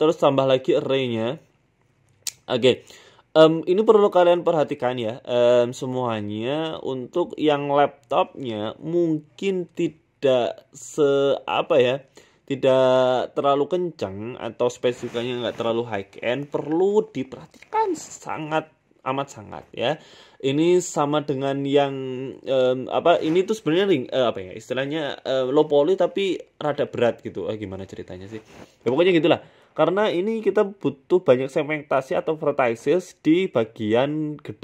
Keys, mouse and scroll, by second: 0.2 KP_3, 0.6 scroll down 3, 0.6 scroll up 1, 0.7 scroll down 1, 0.8 shift+middle click, 1.1-1.5 scroll up 8, 1.5 shift+middle click, 1.9-2.4 scroll down 5, 2.5 shift+middle click, 4.3 click, 6.6 scroll up 3, 6.8 scroll down 1, 7.1 shift+middle click, 7.5-7.9 scroll down 4, 8.1 scroll up 2, 8.3 shift+middle click, 9.2 click, 11.7 ctrl+z, 12.2 click, 14.3 click, 16.9 click, 19.4 click, 21.1 scroll down 5, 21.2 scroll up 2, 21.4-22.0 scroll down 10, 21.6-22.0 scroll up 1, 22.9 click, 23.0 click, 23.1 click, 23.3 click, 23.4 click, 23.6 click, 24.4 shift+middle click, 25.3 g, 26.5 scroll up 5, 26.8 scroll down 1, 27.0 shift+middle click, 27.4 s, 29.5 click, 29.8 click, 30.4 g, 33.1 g.